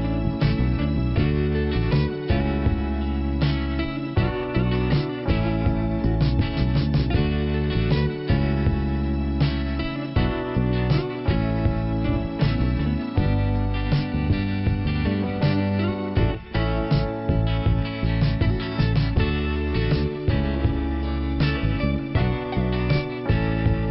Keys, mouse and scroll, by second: 2.6-2.9 scroll up 1, 3.4-3.7 scroll up 1, 4.9 click, 6.6 click, 7.7 click, 9.8 click, 11.2 click, 12.5 click, 15.5 click, 16.9 click, 19.3 click, 19.4 click, 21.9 click.